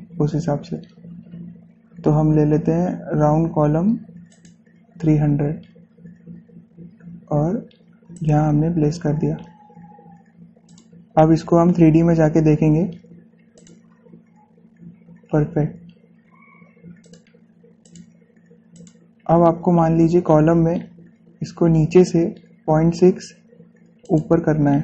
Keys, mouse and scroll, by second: 0.8 scroll up 1, 2.1 typing, 5.1 click, 5.1 typing, 8.9 click, 11.5 click, 13.1-14.1 scroll up 1, 14.4 click, 15.4 scroll down 1, 15.8 scroll up 1, 17.8 click, 20.6 scroll up 1.